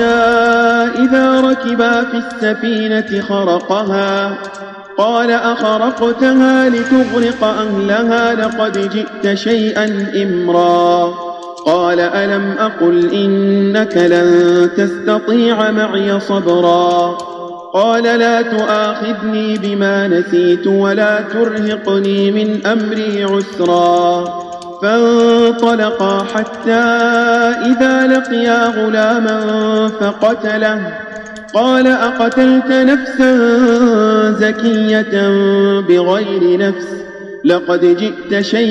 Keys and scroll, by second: 0.2 space, 1.2 space, 2.2 space, 4.4 space, 7.2 space, 8.7 space, 11.4 space, 17.1 space, 19.5 space, 22.0 space, 24.5 space, 25.5 space, 26.1 space, 26.9 space, 28.1 space, 29.2 space, 31.3 space, 32.2 space.